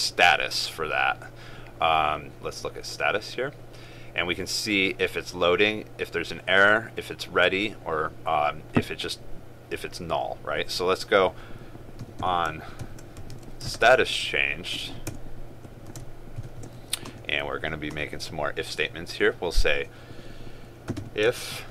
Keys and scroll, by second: 13.9 ctrl+space.